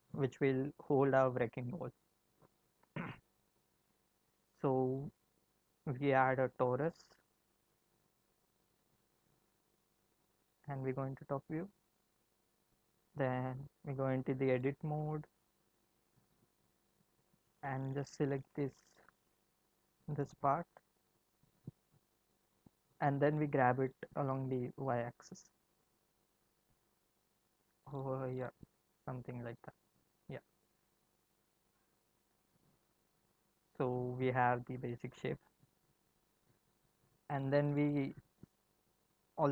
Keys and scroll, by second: 5.3 shift+a, 9.5 Num_Lock, 10.5 7, 10.8 Num_Lock, 13.8 Tab, 23.9 g, 34.5 Tab, 37.0 Tab.